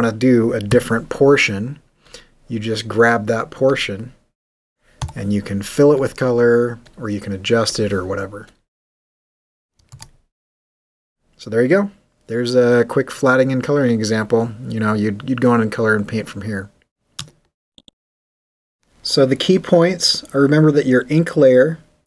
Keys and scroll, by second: 2.7 x, 8.9 w, 11.1 g, 13.6 super+d.